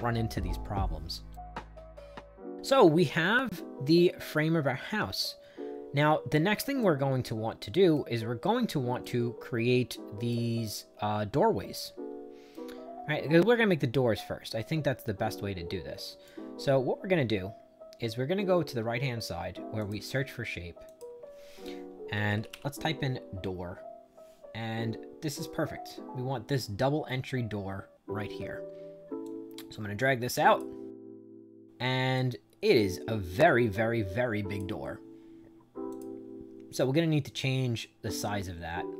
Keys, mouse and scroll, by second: 1.2-6.7 right drag, 7.5 right click, 8.9-10.2 right drag, 12.4-16.1 right drag, 19.7 click, 20.8 click, 21.8-22.8 typing, 29.1-30.5 drag, 32.0-34.5 drag, 35.8 click.